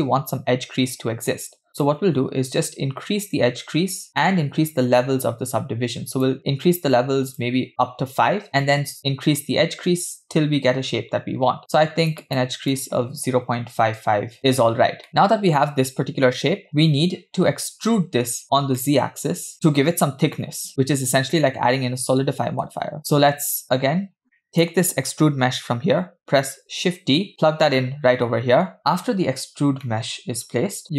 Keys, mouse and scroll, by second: 1.9-6.3 drag, 7.3 click, 11.3-14.4 drag, 13.9 BackSpace, 14.0 BackSpace, 15.1-15.6 middle drag, 18.5 scroll down 1, 18.8 middle click, 19.4 click, 20.4 middle click, 20.7-21.5 scroll down 1, 23.0 shift+a, 24.2 scroll down 1, 24.3 middle click, 24.5 click, 26.6 shift+d, 29.1-29.4 scroll up 3, 29.9 middle click.